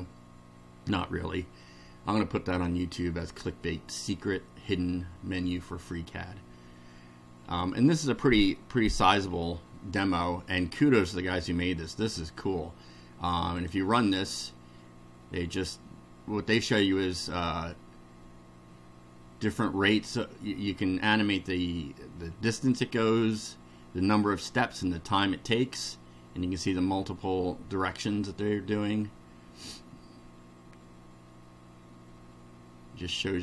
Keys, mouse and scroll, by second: 13.6 click.